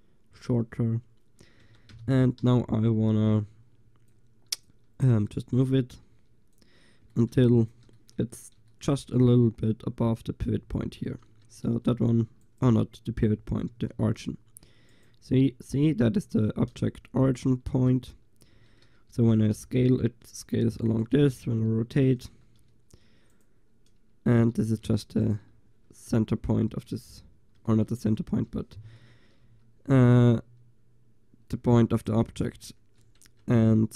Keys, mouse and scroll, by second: 1.7 Tab, 2.0 a, 2.5 a, 4.2-6.8 drag, 6.8 middle click, 7.2 click, 11.3 Tab, 11.9 g, 13.8 r, 18.0 Tab, 18.6 Tab, 19.8 s, 21.6 r, 24.7 g, 25.4-27.3 drag, 29.5 g, 32.3 drag, 33.3 Tab.